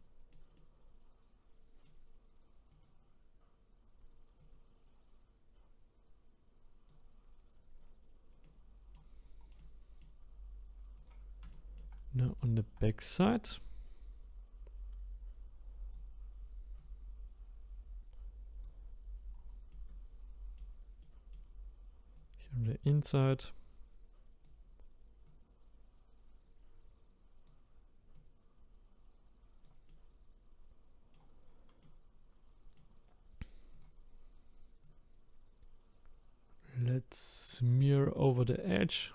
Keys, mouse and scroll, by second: 2.8 click, 4.6-7.8 drag, 7.8-8.4 scroll down 4, 8.4 middle click, 9.2-9.6 scroll down 1, 9.6-11.1 middle drag, 11.1 click, 11.5 shift+middle click, 11.9-12.4 scroll up 6, 12.4-13.8 shift+middle drag, 13.8-19.3 drag, 19.3-19.7 scroll down 1, 19.7-22.7 middle drag, 22.7-29.9 drag, 29.9-31.5 middle drag, 31.5-31.8 scroll down 1, 31.8-33.1 middle drag, 33.1-33.4 scroll up 2, 33.8 click, 34.0 scroll up 1, 34.8-37.7 drag, 37.7 middle click, 38.6-39.1 drag.